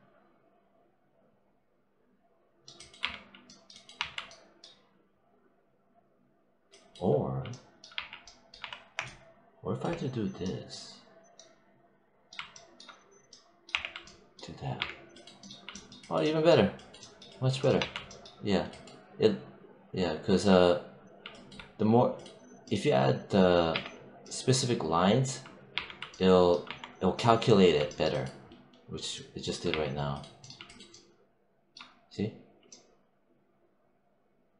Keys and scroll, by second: 2.9 3, 3.8 1, 7.8 3, 8.4 1, 13.6 w, 14.6 3, 17.6 1, 23.6 q, 25.6 3, 26.5 1, 29.5 3.